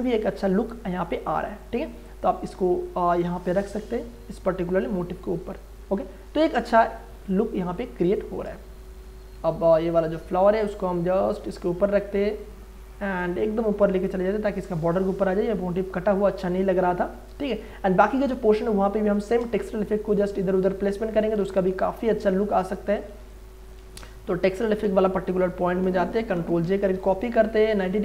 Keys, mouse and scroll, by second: 1.3-3.2 drag, 3.2 click, 4.3-7.1 drag, 7.1 space, 7.3-13.2 ctrl+drag, 13.2-15.1 drag, 15.0 ctrl+space, 15.3 ctrl+click, 15.6 ctrl+space, 16.7 ctrl+space, 20.6 click, 21.3 ctrl+z, 23.0 click, 23.8 ctrl+z, 24.9 m, 25.3 click, 26.3 ctrl+j, 26.6 ctrl+t, 27.0 ctrl+right click, 27.8-28.0 drag.